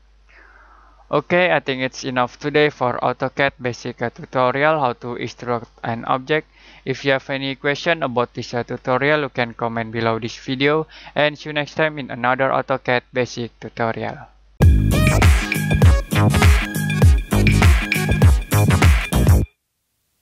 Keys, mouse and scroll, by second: 0.2 middle click.